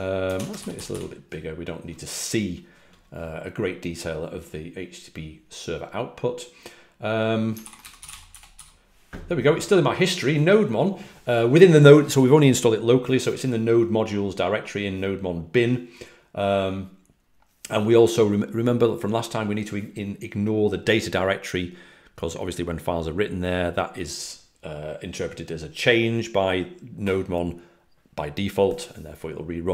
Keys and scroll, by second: 0.4-1.1 typing, 8.0-8.5 typing.